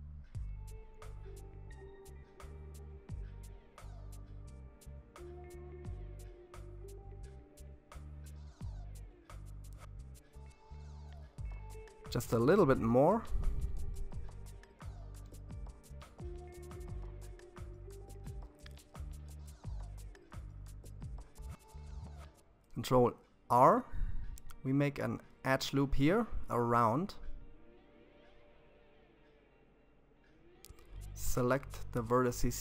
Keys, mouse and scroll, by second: 1.8 shift+z, 2.6-5.7 middle drag, 9.1 g, 12.3-19.3 middle drag, 20.7 ctrl+r, 26.5-28.9 middle drag, 28.9 click, 30.3 shift+click, 31.8 ctrl+KP_1.